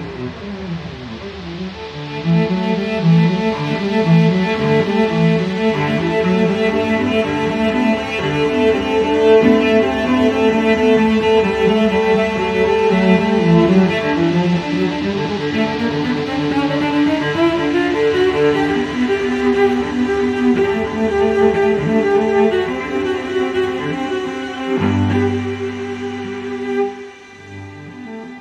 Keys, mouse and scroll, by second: 0.9 click, 2.4 click, 4.2 click, 6.1 click, 8.0 click, 10.2 click, 12.2 click, 13.8 click, 14.7 scroll down 2, 15.4 scroll up 2, 17.9 click, 19.7 click, 21.3 click, 22.7 click, 24.6 click, 26.1 click, 28.2 click.